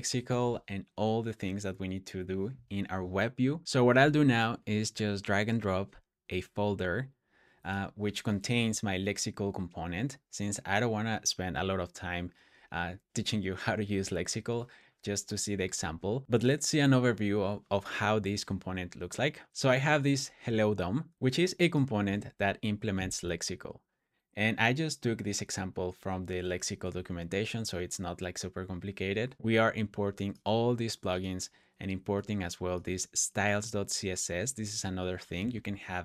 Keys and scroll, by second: 0.0-0.1 typing, 3.2 BackSpace.